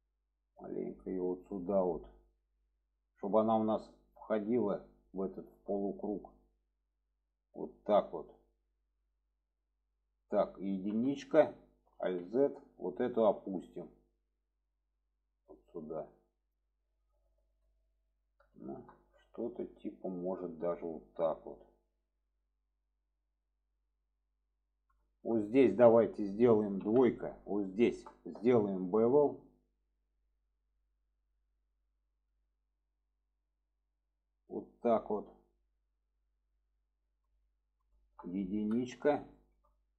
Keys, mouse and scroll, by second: 0.6 click, 2.5-3.2 middle drag, 4.1 middle click, 5.2-5.5 middle drag, 6.3-8.7 drag, 9.2-9.9 middle drag, 11.8 alt+1, 12.0 alt+z, 12.9-13.5 alt+middle drag, 14.3 click, 17.4 alt+z, 18.5 shift+middle drag, 19.0-21.9 middle drag, 22.3-24.9 middle drag, 25.0 shift+middle drag, 27.7 alt+shift+click, 28.3-29.0 middle drag, 29.3-29.7 middle drag, 30.2-30.7 middle drag, 32.3-36.5 drag, 36.9-37.5 alt+middle drag, 38.1 shift+middle click, 39.3 middle drag.